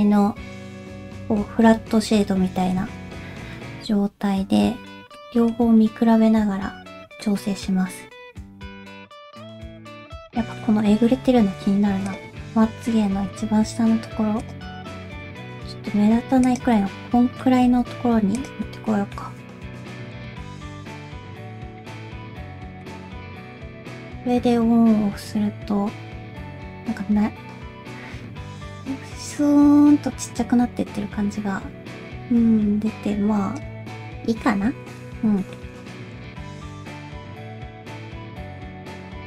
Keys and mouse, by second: 2.8 Tab, 5.2 middle click, 7.2 middle click, 8.7 ctrl+z, 9.2 alt+z, 9.4 middle click, 10.0 alt+z, 10.6 middle click, 11.1 g, 12.3 middle click, 13.2 g, 14.7 middle click, 16.7 middle click, 17.7 g, 18.6 middle click, 19.4 g, 19.9 middle click, 20.7 click, 20.9 g, 21.2 middle click, 22.1 Tab, 22.9-33.6 drag, 34.5 middle click, 35.4 shift+middle click, 36.0 Tab, 36.2 click, 36.4 g, 37.0 click, 37.1 g, 37.6 shift+middle click, 37.8 middle click, 38.4 click, 38.5 middle click, 38.7 g.